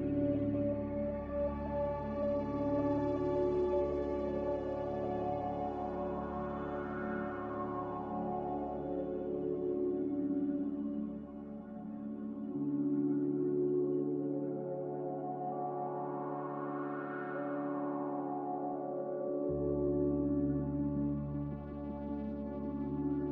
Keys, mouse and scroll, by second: 20.9 a.